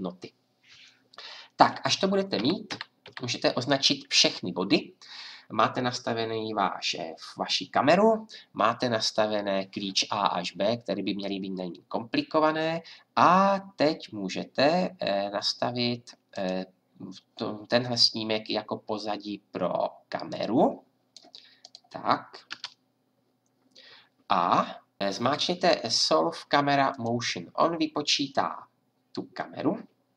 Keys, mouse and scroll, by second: 2.4 click, 2.4 a, 2.7 a, 3.0 a, 16.3-20.4 drag, 22.5 KP_0, 25.0 F10, 26.9-28.8 drag.